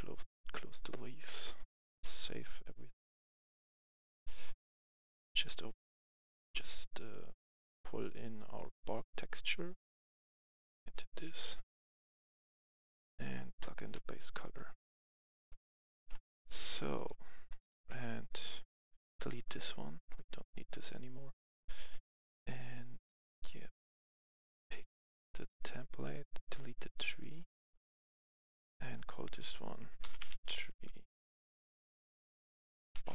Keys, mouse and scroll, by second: 11.2 right click, 12.3 click, 13.6 right click, 16.0 click, 16.1 F10, 16.9 click, 19.2 Delete, 20.0-21.1 drag, 23.1-27.1 drag, 26.4 Delete, 29.1 F2, 30.2 typing, 32.9-33.1 typing.